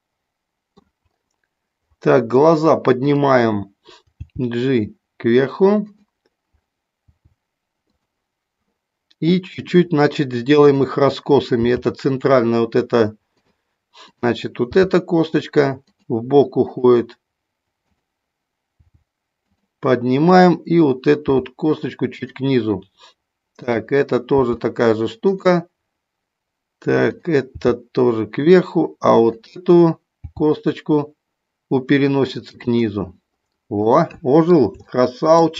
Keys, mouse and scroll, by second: 3.0 click, 4.1 g, 5.9 click, 7.9 click, 10.7 click, 11.7 g, 13.3 click, 14.6 g, 15.8 click, 16.7 click, 17.8 click, 18.7 g, 19.5 click, 21.2 g, 24.4 g, 27.0 click, 27.6 g, 30.2 g, 33.8 middle click, 34.8 shift+middle click.